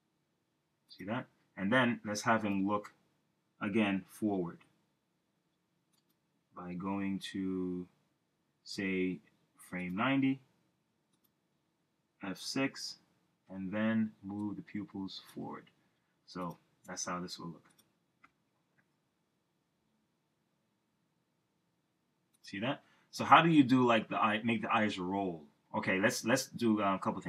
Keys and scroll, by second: 4.9 F5, 7.0 super+z, 12.5 F6, 18.3 Return.